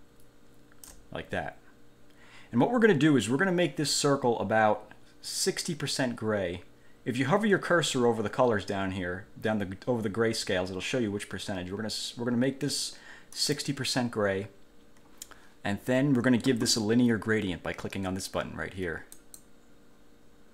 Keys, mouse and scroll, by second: 4.2-4.8 scroll up 2, 13.6 click, 19.4 click.